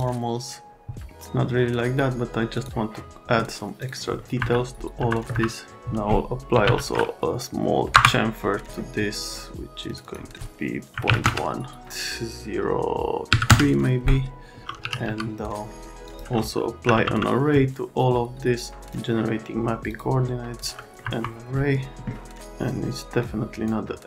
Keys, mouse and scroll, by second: 0.0-2.0 drag, 2.5 click, 3.8 click, 4.4 F3, 5.0 F3, 5.3 F3, 6.3-7.1 typing, 7.9 Return, 10.0 click, 10.9 KP_Decimal, 11.1 KP_1, 11.2 KP_Enter, 13.3 KP_3, 13.5 KP_Enter, 14.8 f, 15.1 z, 16.0 click, 16.6 a, 16.9 e, 18.8 click, 19.9 click, 20.8 middle click, 21.0 F3, 23.2 click.